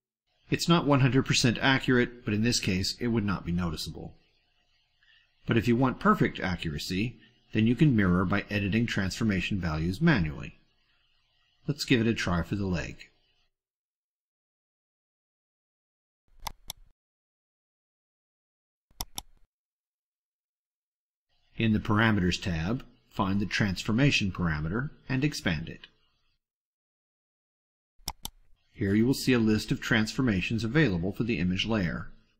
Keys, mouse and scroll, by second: 3.1-4.0 drag, 4.2-5.1 drag, 5.2-6.0 drag, 6.1-6.9 drag, 7.2 click, 8.3 click, 10.0 click, 11.8-12.6 middle drag, 12.8 middle click, 15.0-15.8 middle drag, 16.2 click, 18.8 click, 20.2-21.2 drag, 23.2-25.9 drag, 27.8 click.